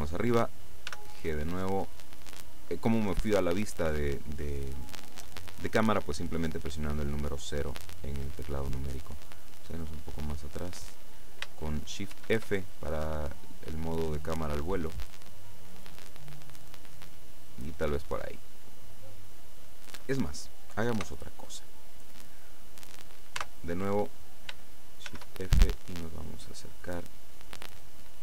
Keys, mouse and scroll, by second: 1.0 g, 8.5 click, 9.5-10.0 scroll down 2, 10.6-11.0 scroll up 2, 12.2 shift+f, 13.0 scroll down 2, 17.4 click, 21.1 KP_0, 23.5 KP_0, 25.2 shift+f, 25.5-26.0 shift+scroll up 2, 26.3 click.